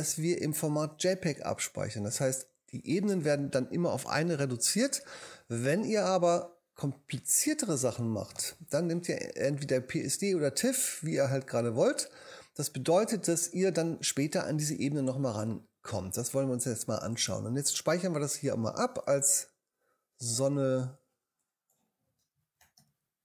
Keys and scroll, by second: 22.1-23.2 typing.